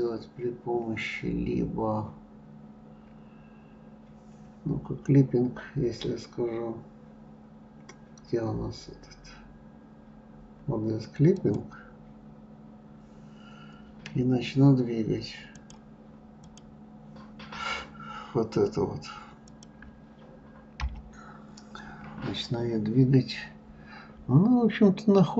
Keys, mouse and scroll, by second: 11.8 click, 16.0-18.2 drag, 18.2-19.9 scroll down 2, 19.9 click, 21.2 l, 22.5 scroll up 2, 24.2-24.8 scroll up 1.